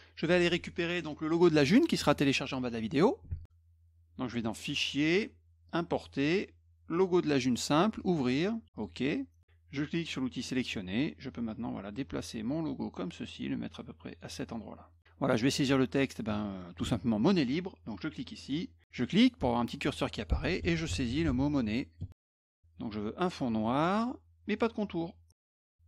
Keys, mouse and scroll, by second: 3.3 alt+Tab, 4.8 click, 5.7 click, 6.9 click, 8.0 click, 9.2 click, 10.5 click, 11.5-14.2 drag, 15.4 middle click, 16.3 middle click, 18.4 click, 19.0 click, 20.4-22.1 typing, 23.8 click, 25.4 middle click.